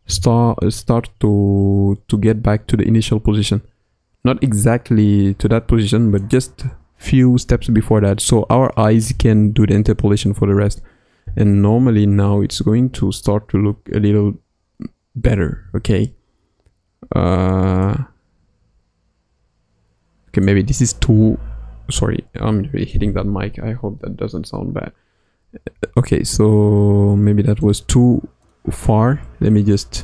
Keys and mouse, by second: 8.2 i, 11.2 space, 15.4 space, 17.8-20.4 drag, 20.7-25.6 drag, 25.6 g, 28.4 click.